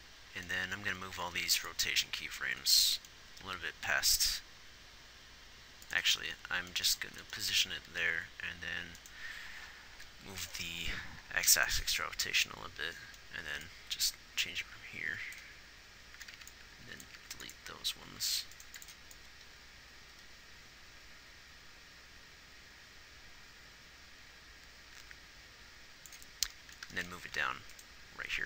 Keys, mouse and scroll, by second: 1.3 a, 1.7 b, 3.7 g, 10.4 g, 17.4 b, 18.4 x, 19.0 x, 27.6 g.